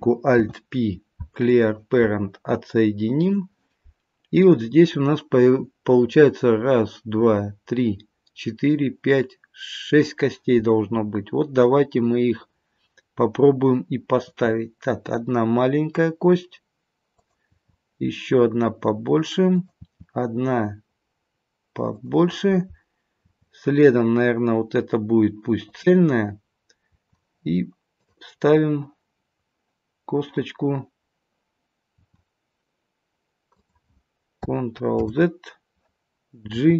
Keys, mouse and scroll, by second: 0.3 alt+p, 3.1 click, 14.2 e, 17.5 e, 19.8 e, 23.2 e, 26.9 e, 28.3-29.1 scroll down 1, 29.1-29.9 scroll down 3, 29.9-30.8 scroll down 1, 30.8-32.0 scroll up 1, 32.0 e, 35.0 ctrl+z, 36.5 g.